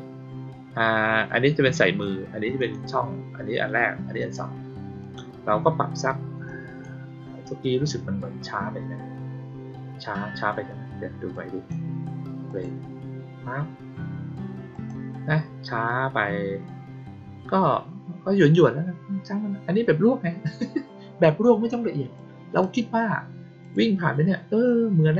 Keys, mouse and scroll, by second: 2.5 click, 4.1 click, 4.9 click, 6.4 click, 11.2 click, 12.4 click, 14.6 click, 22.1-22.5 drag, 23.5 click.